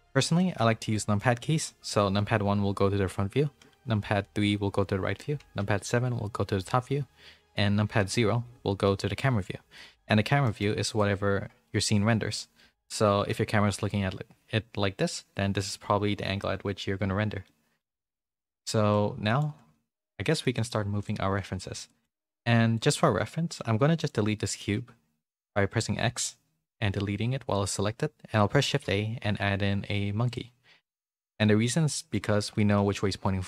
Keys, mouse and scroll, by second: 0.3 middle click, 0.9 middle click, 2.1 KP_1, 3.5 KP_3, 8.0 KP_0, 9.7 middle click, 10.4 middle click, 10.8 click, 13.1 KP_0, 17.4 middle click, 18.1 middle click, 19.2 middle click, 20.2 shift+middle click, 20.5 middle click, 21.0 click, 21.8 shift+middle click, 22.2-27.2 drag, 28.6 shift+a, 31.7 middle click, 32.5 middle click.